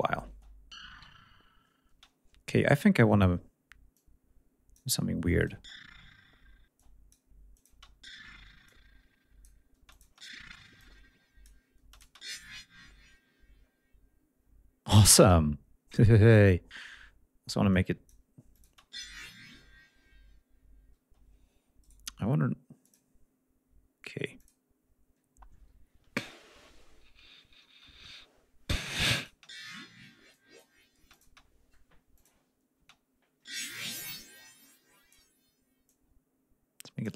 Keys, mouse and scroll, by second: 0.3 ctrl+space, 0.8 ctrl+scroll up 2, 2.0 space, 4.0 click, 5.4 click, 5.6 space, 6.7 space, 6.8 click, 7.6 click, 7.8 space, 8.7 click, 9.8 space, 9.9 click, 10.8 click, 11.9 space, 12.0 click, 15.2 space, 17.8 click, 18.6 click, 18.7 space, 21.0 space, 21.9 right click, 22.9 click, 24.4 click, 29.2 click, 29.4 space, 30.4 click, 31.0 space, 31.2 click, 32.2 click, 32.8 space, 34.4 click, 35.9-37.1 drag.